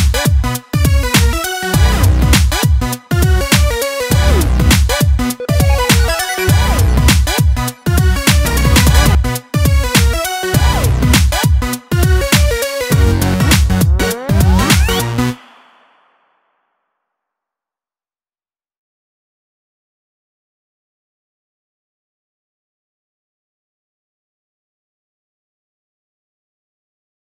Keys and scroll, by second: 7.7 ctrl+d.